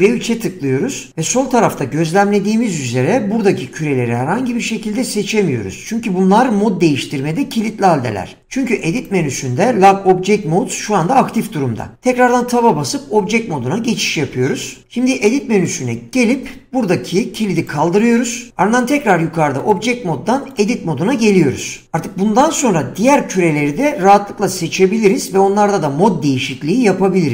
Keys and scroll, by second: 12.3 Tab.